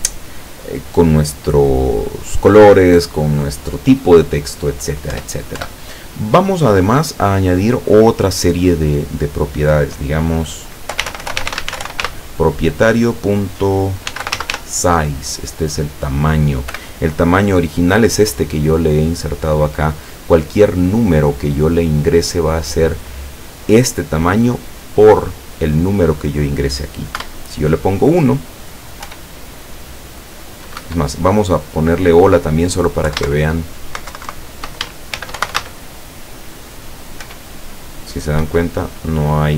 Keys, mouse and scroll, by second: 5.2 Return, 11.0-12.0 typing, 14.1 s, 14.2 i, 14.4 z, 14.5 e, 16.8 =, 27.2 KP_1, 29.1 p, 30.8 Escape, 32.2 click, 33.1 Left, 33.4 shift+Right, 35.2 shift+h, 35.4 shift+o, 35.5 shift+l, 35.6 shift+a, 37.3 p, 38.4 Escape.